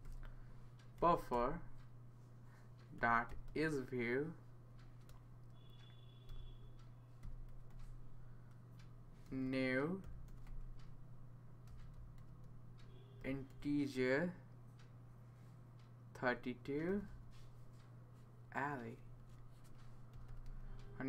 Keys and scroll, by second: 1.3 Return, 2.7-3.9 typing, 6.3-8.2 typing, 9.2-13.7 typing, 16.6-17.4 typing, 19.0-21.0 typing.